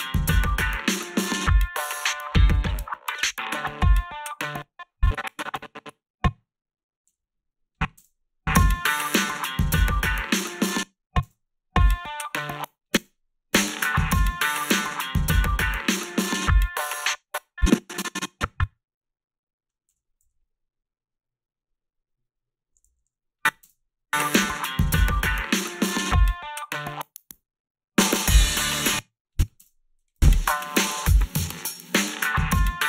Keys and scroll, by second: 4.3 space, 7.1 g, 8.0 space, 10.6 space, 11.2 space, 12.4 space, 13.0 space, 16.8 space, 19.9 g, 20.2 t, 22.9 a, 23.6 space, 28.7 space, 29.6 space.